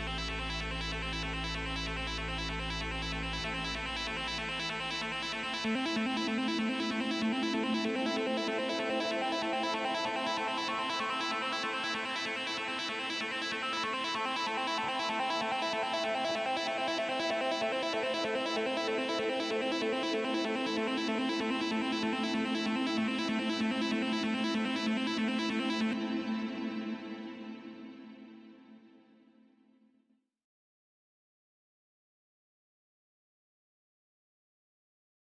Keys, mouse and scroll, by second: 11.4 right click, 11.5 Return, 11.5 5, 13.7 scroll down 10, 13.9 scroll up 5, 22.5 scroll up 10, 22.6 scroll down 1, 23.0 scroll up 1, 24.2 scroll up 8, 24.5 double click, 25.6 double click, 27.7 double click, 30.2 double click, 34.7 right click.